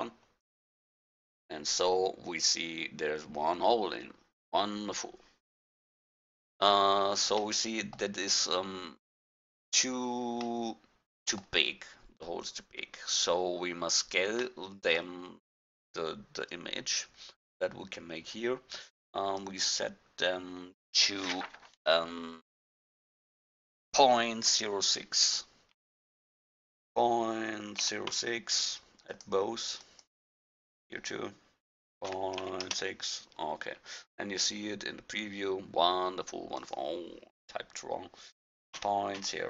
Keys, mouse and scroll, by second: 0.0-2.9 drag, 7.6-9.1 middle drag, 9.3 middle drag, 12.9 middle click, 13.0 middle click, 13.2 middle click, 13.4 middle click, 13.6 middle drag, 14.0 middle click, 14.5 middle click, 14.7 middle click, 14.9-16.6 middle drag, 19.4-21.3 drag, 30.5-32.7 drag, 36.6-38.8 drag.